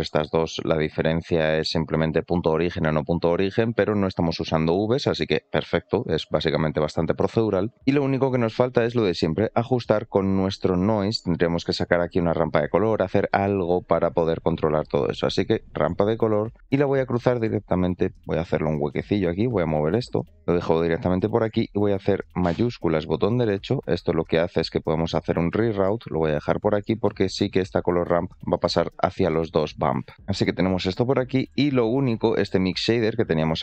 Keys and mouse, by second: 5.8 middle click, 13.4 middle click, 13.9 shift+a, 25.2-25.8 drag, 27.2 click, 29.2 shift+middle click, 31.6 shift+middle click, 33.3 click.